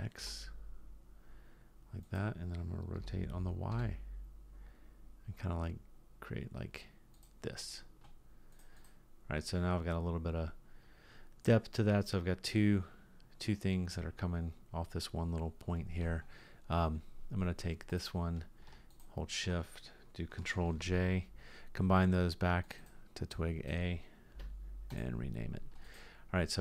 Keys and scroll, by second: 3.0 r, 20.8 ctrl+j.